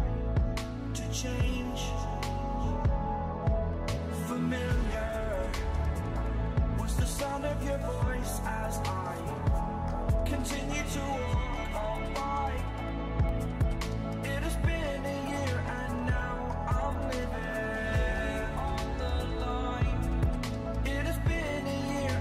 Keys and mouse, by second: 0.0-0.3 typing, 0.8 alt+m, 1.8-2.9 middle drag, 2.9 right click, 3.1 Delete, 3.9 e, 4.3 alt+m, 6.1 right click, 6.4 Delete, 7.2 e, 7.6 alt+m, 8.8-14.1 typing, 13.5 click, 14.9 click, 17.1 drag, 17.3 g, 19.1 g, 20.8-22.2 typing.